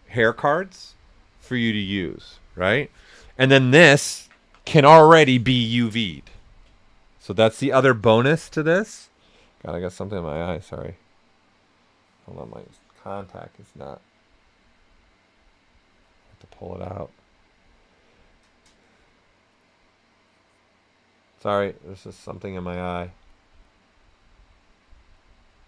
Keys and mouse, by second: 6.6-25.6 drag, 6.6 typing.